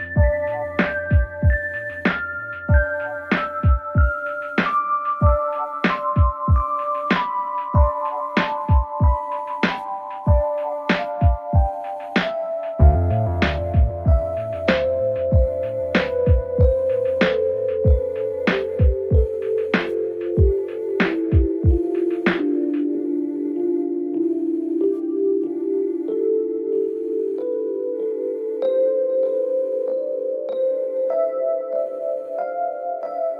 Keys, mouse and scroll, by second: 2.9 space, 3.0-3.5 click, 3.2 space, 4.4 click, 14.1 space, 14.3 click, 14.4 space, 15.6 click, 26.6 shift+click, 26.9 space, 27.0 click, 27.1-27.4 space, 27.9 shift+click, 30.3 alt+scroll down 1, 31.0-31.6 alt+scroll up 1.